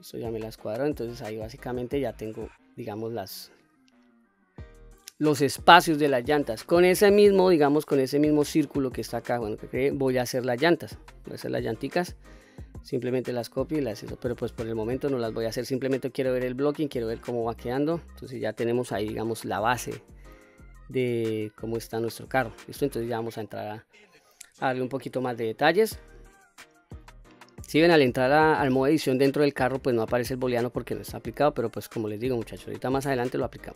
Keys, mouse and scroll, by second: 2.4 click, 3.1-5.9 middle drag, 8.9 click, 13.7 click, 14.4-14.9 middle drag, 15.3-16.3 scroll up 2, 15.7-16.8 middle drag, 17.1 scroll down 2, 17.4-18.1 middle drag, 20.6-21.4 scroll up 1, 22.3-22.6 scroll down 1, 22.9 click, 23.5-24.0 middle drag, 25.1 Tab, 25.7-26.5 scroll up 2, 26.0-27.0 middle drag, 27.5 scroll down 1, 31.1-31.6 middle drag, 32.5 3, 33.1-33.7 middle drag.